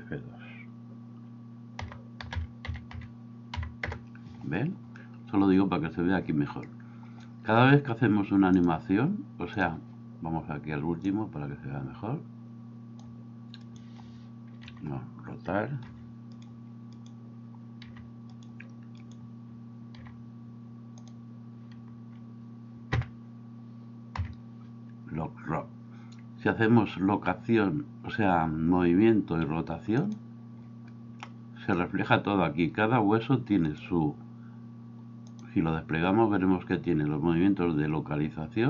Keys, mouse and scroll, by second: 8.5-9.7 drag, 11.0-13.0 drag, 14.6 r, 15.9 r, 17.9 r, 20.0 r, 23.0 l, 24.3 i.